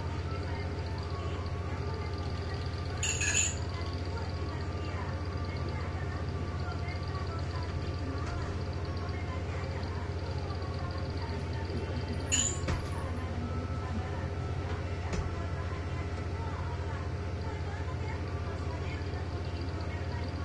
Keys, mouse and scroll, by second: 3.3 click, 4.8-6.2 drag, 6.7 click, 7.8 1, 8.4 Return, 11.0 click, 12.4 0, 12.8 Return, 13.7 click, 14.6 1, 15.2 Return, 18.2 click, 20.2 click.